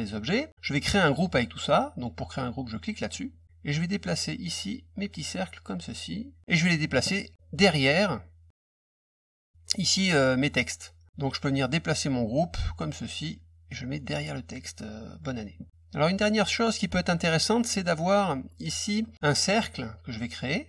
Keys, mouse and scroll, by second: 3.0 click, 3.8-5.9 drag, 6.0 click, 12.0-14.1 drag, 20.1 click.